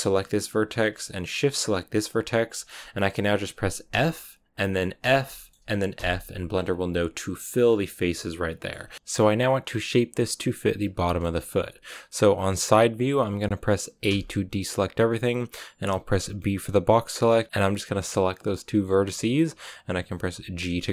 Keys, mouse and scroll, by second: 0.0-2.4 shift+right drag, 2.4-3.8 shift+middle drag, 3.8 e, 4.5 middle click, 5.2 shift+middle click, 7.5 scroll down 3, 7.7-8.7 middle drag, 8.8 middle click, 8.9-11.0 scroll down 1, 11.0-14.0 shift+middle drag, 14.0 a, 17.5-20.2 shift+middle drag, 20.2 g.